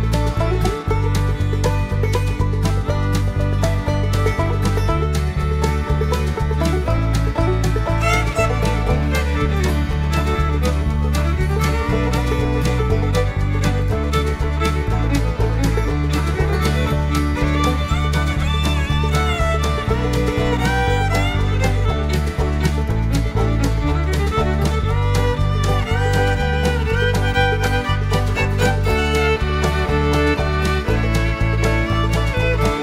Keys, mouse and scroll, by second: 0.2 click, 1.5 click, 3.0 click, 4.6 click, 5.5-7.0 typing, 8.1-11.8 typing, 13.4 click, 14.4 click, 15.6 click, 16.6 shift+0, 18.0-18.8 drag, 19.3 right click, 21.6 shift+0, 23.1 click, 24.2 right click, 25.6 click, 26.6 click, 27.8 click, 29.2 click, 30.1-30.8 drag.